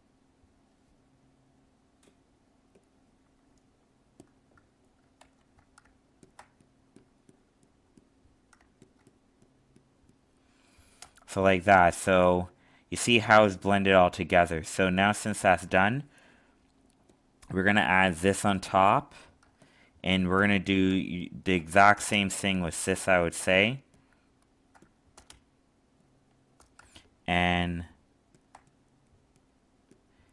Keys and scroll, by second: 5.2 ctrl+z, 19.4 alt+space.